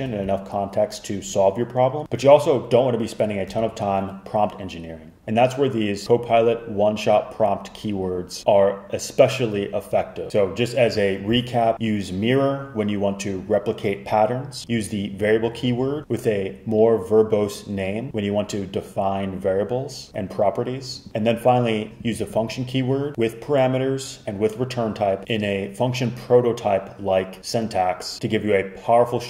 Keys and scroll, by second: 2.0 fn+Escape, 10.3 Escape.